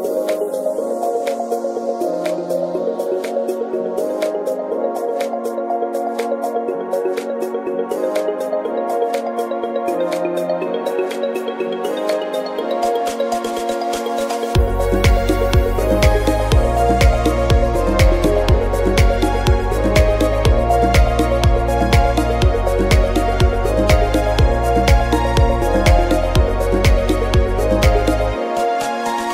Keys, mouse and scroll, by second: 0.0 n, 0.2 n, 0.7 click, 1.2 click, 1.3 n, 1.5 scroll down 3, 1.7 scroll up 10, 1.9 shift+middle click, 2.5 scroll down 2, 2.7 middle click, 3.0 shift+middle click, 3.2 scroll up 2, 3.3 middle click, 4.6 click, 5.8 click, 5.8 scroll down 1, 6.3 click, 7.3 click, 8.7 middle click, 9.9 click, 10.9 click, 11.8 click, 14.2 click, 21.7-22.2 scroll down 2, 22.5 scroll up 1, 23.2 click.